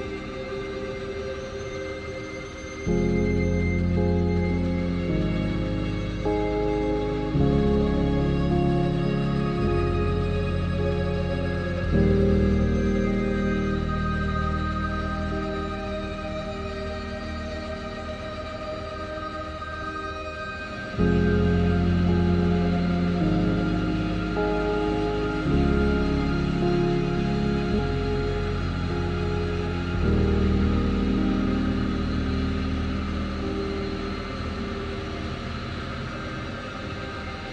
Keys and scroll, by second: 4.6 ctrl+alt+z.